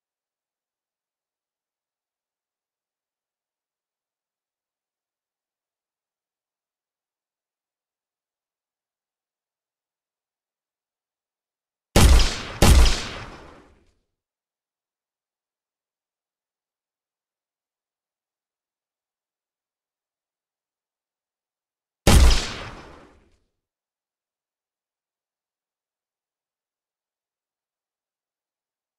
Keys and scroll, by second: 6.0 w, 12.9 s, 16.4 w, 17.7 a, 18.2 w, 19.3 s, 20.1 d, 25.1 Escape.